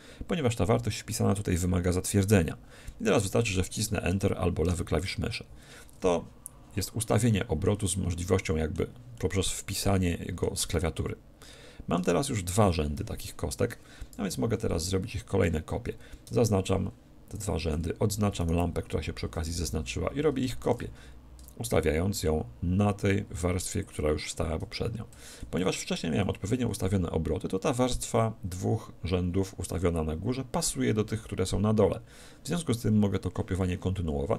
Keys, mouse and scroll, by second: 6.8-12.7 middle drag, 8.0 z, 14.2 KP_1, 14.7 a, 15.7 z, 16.3 b, 18.4-20.3 right drag, 20.7 shift+d, 23.9-25.9 drag, 25.5 z, 26.2-28.2 middle drag, 33.6-34.3 middle drag.